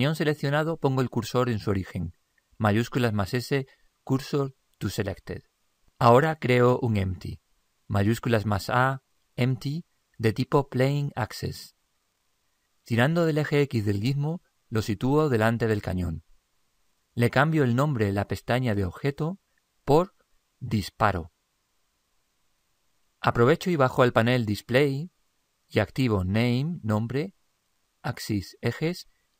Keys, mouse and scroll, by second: 2.7 shift+s, 8.1 shift+a, 14.1 click, 19.4 click, 25.8 click, 28.5-29.3 drag.